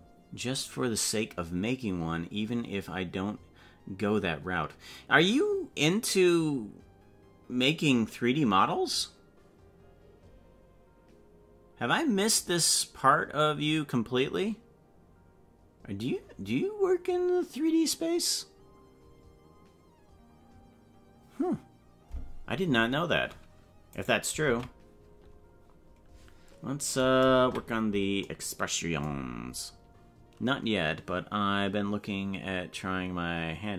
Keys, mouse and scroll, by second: 24.0 right click, 24.4 ctrl+Tab, 27.7 KP_Decimal.